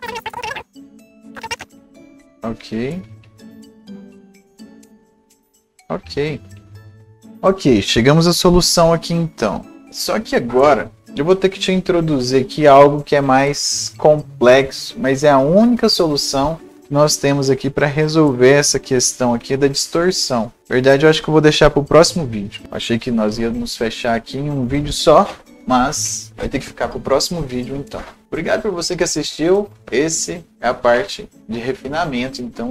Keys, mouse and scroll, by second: 1.2 right click, 6.9-20.6 right drag, 18.6-22.6 drag.